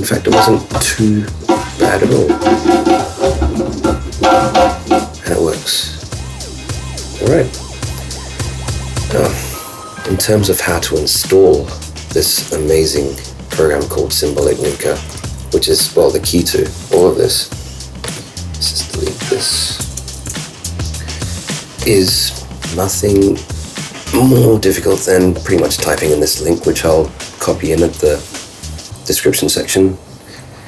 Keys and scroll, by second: 15.2 ctrl+super+q, 19.8 super+BackSpace, 20.6 shift+super+Return.